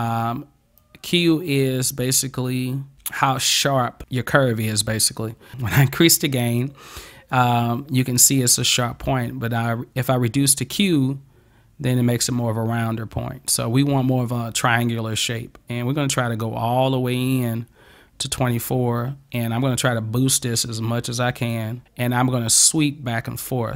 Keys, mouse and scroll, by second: 0.8-4.0 drag, 5.5-8.8 drag, 10.9-17.5 drag, 19.9-21.6 drag.